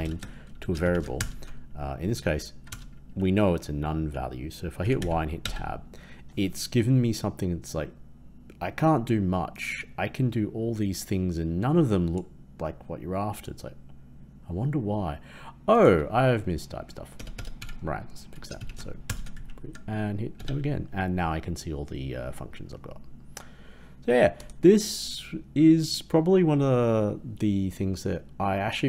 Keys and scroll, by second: 1.1 ctrl+Return, 19.0 ctrl+Return.